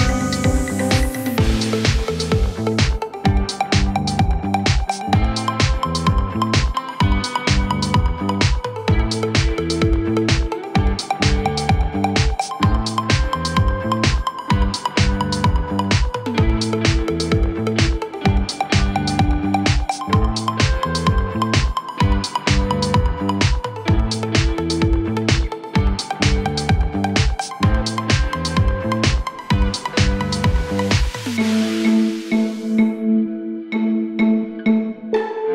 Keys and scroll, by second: 17.2 F3, 17.5 Escape, 20.6 ctrl+z.